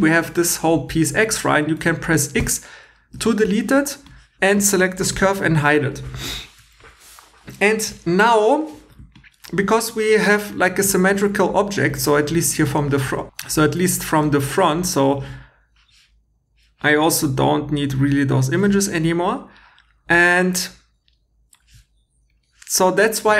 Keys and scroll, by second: 2.4 x, 3.1 2.